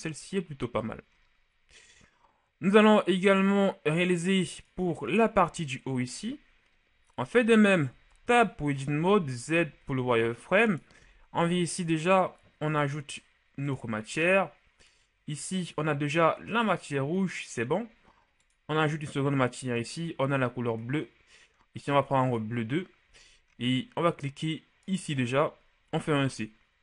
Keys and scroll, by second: 7.9 Tab.